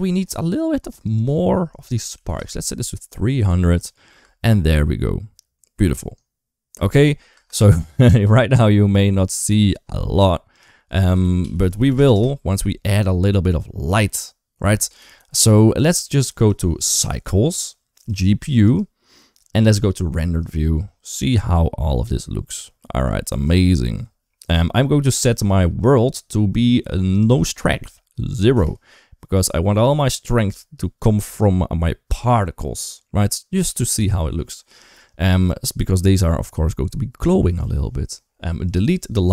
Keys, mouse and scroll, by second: 0.9-2.2 drag, 2.0 0, 3.7 click, 4.0 space, 6.6 space, 7.1 space, 7.4 space, 9.0 ctrl+s, 13.4 KP_1, 13.7 KP_3, 15.0 shift+middle drag, 16.9 click, 17.9 click, 22.3 middle click, 23.4 shift+middle click, 24.9 click, 27.1-28.4 drag, 38.5 click.